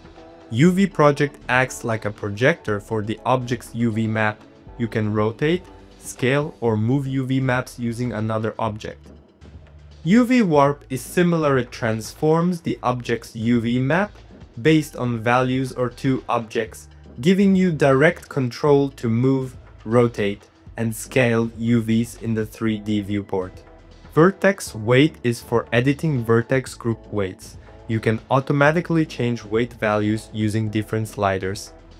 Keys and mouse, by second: 0.1 middle click, 0.5 shift+middle click, 1.3-5.8 typing, 3.7 middle click, 5.6 middle click, 6.9 middle click, 7.3 r, 8.2 middle click, 9.3 r, 12.5 r, 15.2 g, 17.0 middle click, 17.5 click, 17.7 g, 19.6 middle click, 20.1 g, 20.6 middle click, 21.2 g, 21.4 r, 22.5 middle click, 23.6 middle click, 23.8 click, 24.1 middle click, 24.3 click, 25.3 click, 26.7 click, 27.3 click, 28.3 click, 28.8 click, 29.2 click, 30.3 click, 30.7-31.8 drag, 31.9 middle click.